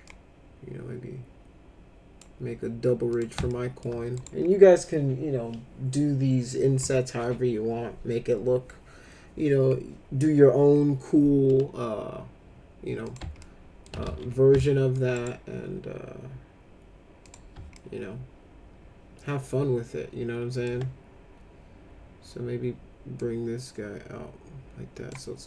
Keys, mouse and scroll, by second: 0.0-2.2 drag, 3.1 click, 3.5 alt+middle click, 4.2 right click, 13.1 click, 13.4 alt+middle click, 14.0 ctrl+z, 14.6 alt+middle click, 15.1 right click, 17.2 click, 17.8-20.7 alt+middle drag, 23.2-25.1 drag.